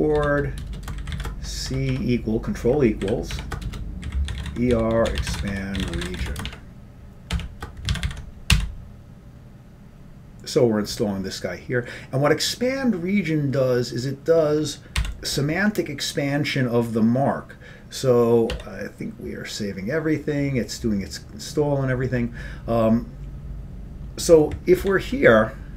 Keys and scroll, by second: 0.0-2.0 typing, 3.1-7.4 typing, 8.0 ctrl+c, 8.1 ctrl+c, 8.6 y, 15.8 y, 18.7 y.